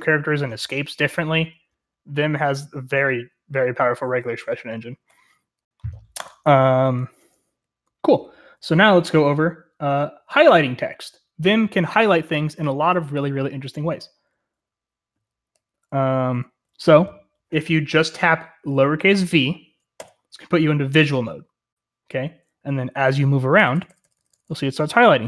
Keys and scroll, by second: 7.3-9.5 typing, 15.6-16.1 k, 16.2 k, 16.7 j, 20.0 v, 23.6-25.2 typing.